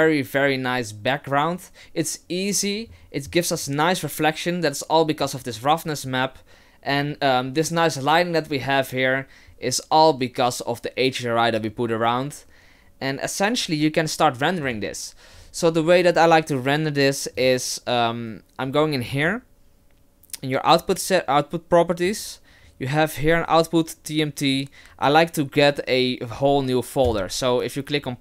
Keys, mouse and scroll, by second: 3.7 middle click, 6.2-6.6 scroll up 1, 14.7 click, 17.4 click, 27.1 click.